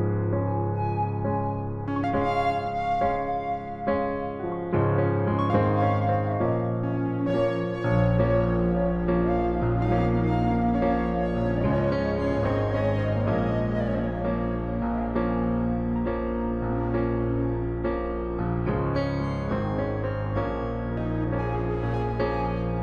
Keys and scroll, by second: 9.6 space, 10.6 e, 12.2-14.1 typing, 16.3 ctrl+z, 17.7-18.5 typing.